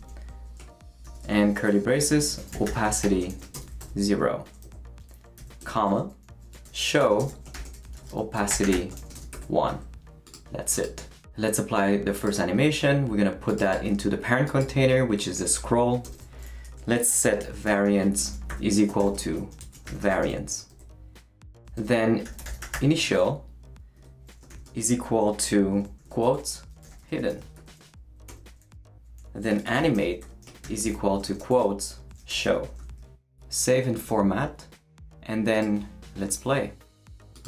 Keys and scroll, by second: 0.0-3.8 typing, 4.6 Right, 5.4-9.3 typing, 5.6 Return, 16.0 Return, 17.2-20.5 typing, 20.7 Right, 21.8 Return, 22.0-24.5 typing, 26.6-27.7 typing, 28.3 Return, 29.2-32.9 typing.